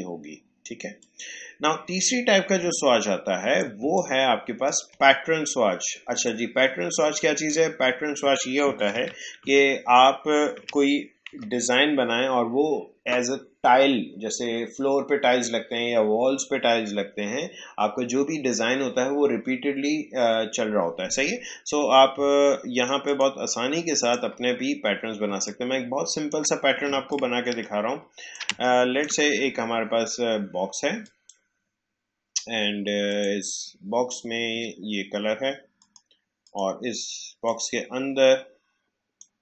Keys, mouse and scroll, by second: 0.9 click, 3.9 shift+click, 8.9 ctrl+z, 23.0 click, 25.4 shift+click, 26.8 ctrl+space, 27.1 ctrl+click, 27.3 ctrl+space, 28.5 click, 28.9 space, 31.0 click, 35.7-39.4 drag.